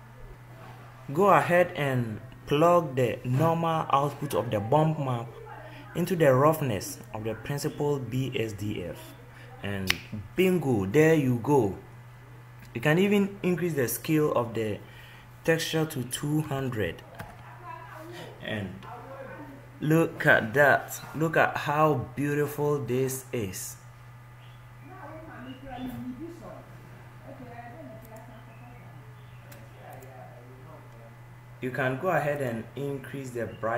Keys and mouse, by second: 0.3 ctrl+z, 16.7 click, 19.1 0.